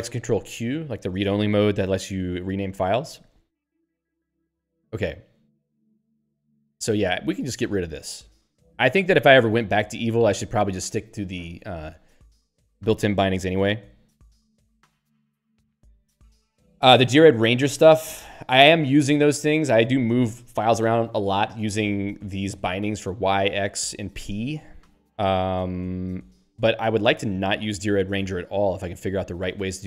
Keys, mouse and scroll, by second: 7.2 Up, 7.8 Left.